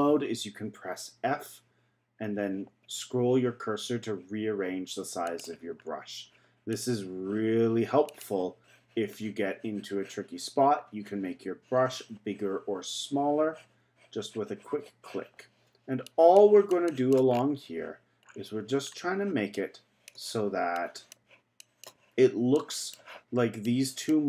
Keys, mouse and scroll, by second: 5.8-6.7 scroll up 2, 6.7-11.2 drag, 16.3-17.3 drag, 17.3-18.3 scroll down 2, 18.3-18.9 scroll up 4, 18.9-19.5 scroll down 2, 19.5-24.2 drag.